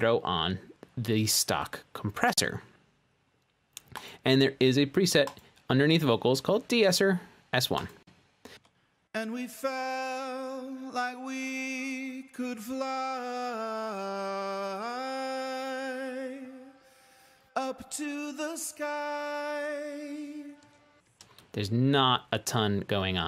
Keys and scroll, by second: 0.0-0.2 typing, 9.7 space, 22.2 space.